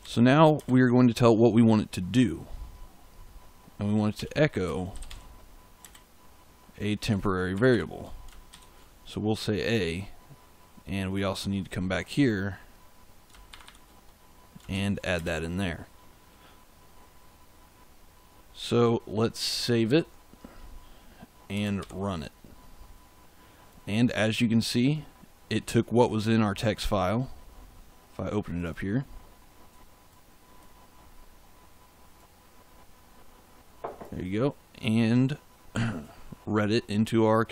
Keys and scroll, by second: 0.0-0.5 typing, 3.8-5.7 typing, 7.4 shift+5, 8.4 shift+a, 13.4 shift+5, 14.6 shift+a, 15.1 space, 19.8 ctrl+s, 21.7 ctrl+shift+z.